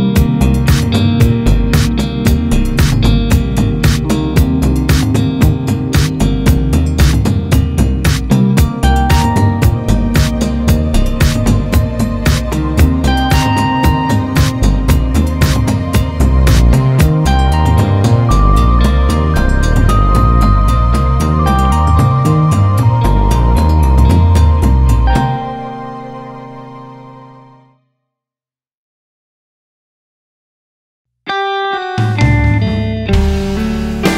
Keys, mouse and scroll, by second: 1.0 click, 1.4 scroll down 1, 1.6 scroll up 1, 2.8 scroll up 1, 3.2 KP_0, 4.1 scroll up 1, 4.5-5.2 scroll down 1, 5.2 click, 7.6-10.0 drag, 10.5 ctrl+shift+click, 12.0-17.6 drag, 17.9 ctrl+shift+click, 19.9-26.8 drag, 26.1 scroll up 2, 30.5 click, 30.8-32.5 drag.